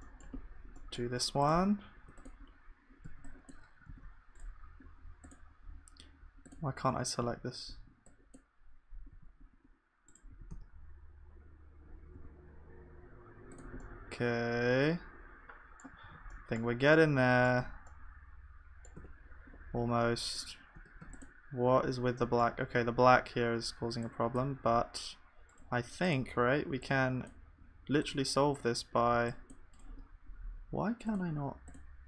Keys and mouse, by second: 3.0 b, 3.8 g, 3.8 x, 7.0 a, 7.2 a, 9.1 a, 9.5 g, 10.3 s, 14.0-16.0 middle drag, 16.0 ctrl+s, 16.5 middle click, 17.1 middle click, 17.5 Tab, 19.0 Tab, 20.8 Tab, 21.0 Tab, 21.0-24.5 middle drag, 23.9 b, 24.5 g, 27.3-32.0 drag.